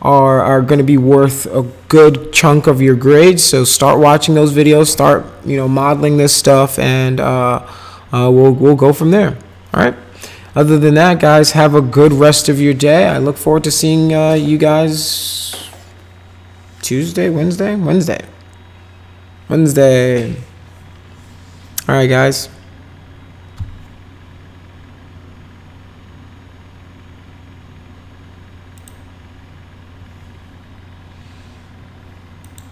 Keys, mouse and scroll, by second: 28.8 click, 32.4 click.